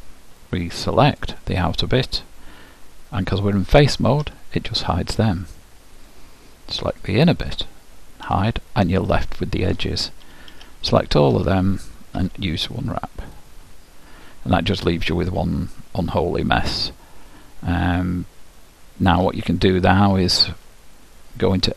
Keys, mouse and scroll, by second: 1.3-3.1 drag, 4.4 h, 7.2-9.0 drag, 8.4 h, 9.3-11.1 middle drag, 10.7 a, 12.3 u, 15.4-17.3 middle drag.